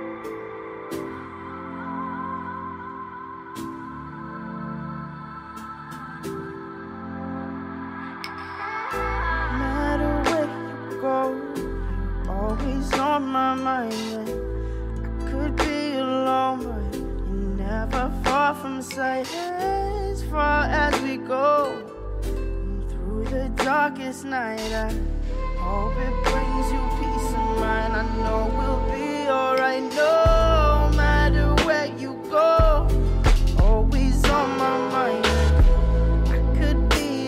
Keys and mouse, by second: 0.1 shift+middle drag, 0.4 shift+middle click, 0.7 middle click, 1.1 shift+middle drag, 1.3-1.9 middle drag, 2.1 shift+middle drag, 2.8 middle drag, 3.7-4.1 middle drag, 4.3 shift+a, 5.1 middle drag, 5.6-5.9 drag, 6.0 click, 7.0 click, 7.6 r, 8.3 r, 9.4 middle click, 9.8 click, 10.7 middle click, 11.1 click, 11.5 middle drag, 11.9 s, 13.1 click, 13.6 shift+middle click, 14.3 s, 15.0 r, 15.7 r, 16.7 click, 17.3 middle drag, 18.2 middle drag, 18.6 click, 19.1 s, 19.9 middle drag, 20.4 shift+middle drag, 20.7 s, 21.2 middle click, 21.3 s, 21.8 click, 22.3 middle click, 22.7 click, 24.2 r, 25.2 middle drag, 25.7 middle drag, 26.1 shift+click, 26.8 ctrl+KP_Subtract, 27.0 middle drag, 27.5 middle drag, 27.8 shift+middle drag, 28.6 shift+d, 29.1 click, 29.4 shift+middle click, 29.8 middle click, 30.1 r, 31.0 r, 32.0 middle click, 32.3 s, 32.9 click, 33.5 click, 34.2 s, 34.9 s, 35.5 click, 36.0 click, 36.5 middle click, 36.9 click.